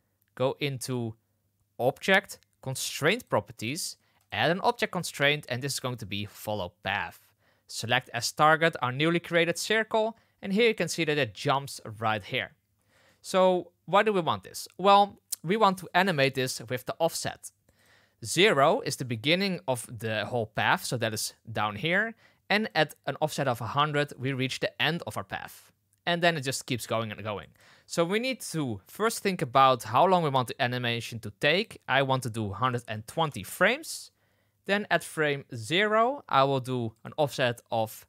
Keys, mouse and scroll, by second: 4.1-6.3 drag, 13.0-13.4 shift+middle drag, 16.5-17.7 drag, 22.7-27.7 drag, 31.5-33.8 drag, 35.0 click, 36.9-38.0 drag.